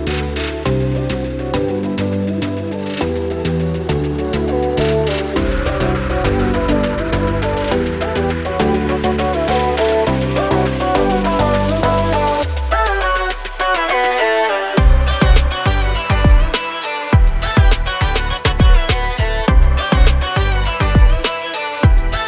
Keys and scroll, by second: 0.0-0.1 typing, 0.3 Escape, 3.2-4.7 typing, 6.2 space, 6.3 Escape, 8.2 l, 11.2 Escape, 11.6 r, 13.3 space, 15.0 l, 16.9 space, 17.7 m, 19.0 Up, 19.3 space, 20.0 m, 21.1 Up.